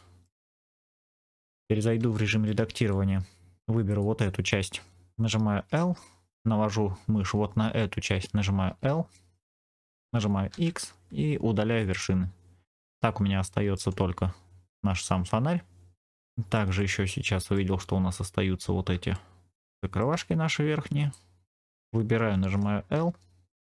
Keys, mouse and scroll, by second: 0.5 middle click, 1.3-1.9 scroll up 2, 2.0 scroll up 1, 2.0 shift+middle click, 2.7 Tab, 3.8 click, 5.6 l, 10.4 x, 12.7 middle click, 16.1 scroll up 3, 16.2 shift+middle click, 16.7 middle click, 18.5 scroll up 1, 19.0 shift+middle click, 21.0 click, 22.8 l, 23.5 middle click.